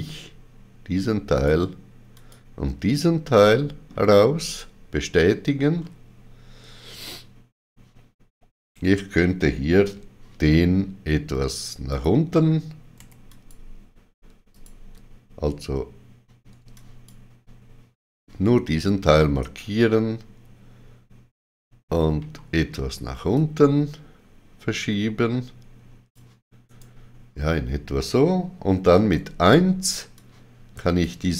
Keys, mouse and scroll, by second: 1.4 click, 3.2 ctrl+middle click, 4.5 right click, 5.7-7.6 scroll down 2, 11.9 click, 11.9-12.9 scroll down 1, 13.0 2, 13.3 click, 14.5 alt+click, 16.7 alt+click, 16.7 ctrl+click, 22.2 g, 23.4 ctrl+click, 26.7 right click, 28.9 1, 30.2 click.